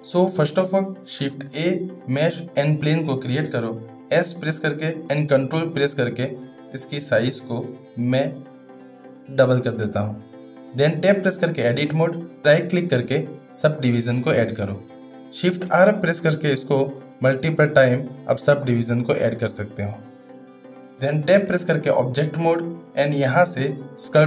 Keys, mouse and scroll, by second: 1.2 shift+a, 4.0 s, 11.0 Tab, 13.2 right click, 16.2-18.4 shift+r, 21.4 Tab.